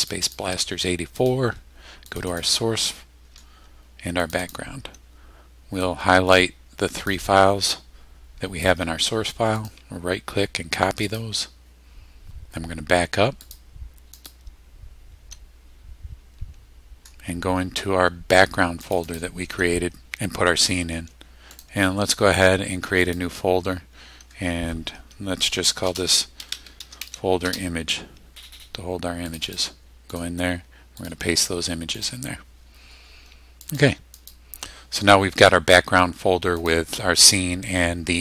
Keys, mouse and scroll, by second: 0.0 click, 1.2 click, 2.1 click, 4.2 click, 5.8-7.2 drag, 9.6 right click, 11.1 click, 13.4 click, 14.2 click, 18.8 click, 21.5 right click, 23.1 click, 25.8-27.5 typing, 29.3 click, 30.1 right click, 31.0 click, 32.0 click, 33.6 click, 34.2 click, 36.6 click.